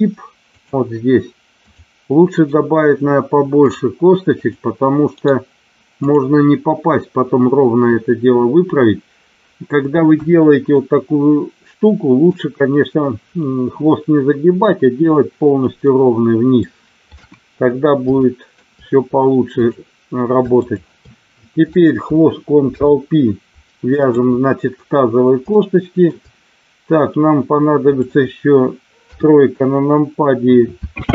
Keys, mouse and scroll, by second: 0.4 click, 1.5 click, 2.5-10.0 right drag, 10.0 KP_1, 10.8-12.3 middle drag, 15.8 middle click, 17.2 KP_1, 18.3 shift+middle click, 19.5 click, 20.5 shift+click, 22.7 ctrl+p, 25.6 shift+middle click, 29.0 KP_3, 30.9 e.